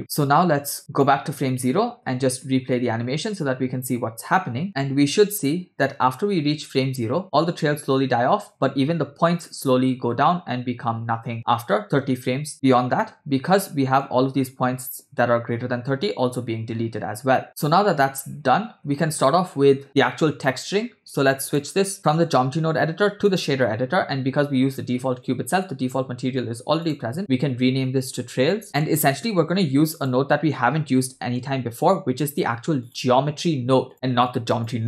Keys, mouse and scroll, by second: 1.2 click, 2.1 space, 12.5 space, 12.7-13.1 scroll down 2, 13.1-14.1 middle drag, 14.1-15.7 scroll up 4, 16.5 space, 17.4-17.8 scroll down 2, 17.8 space, 19.0 space, 21.5-23.5 drag, 25.6-26.0 middle drag, 26.9 click, 27.2-28.6 shift+drag, 28.6 middle click, 29.2 shift+a, 34.3 click.